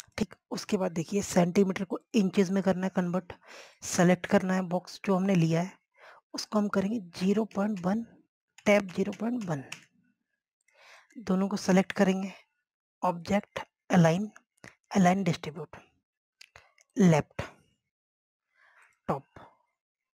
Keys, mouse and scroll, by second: 8.4-10.2 typing, 9.4 Tab, 11.7-13.7 drag.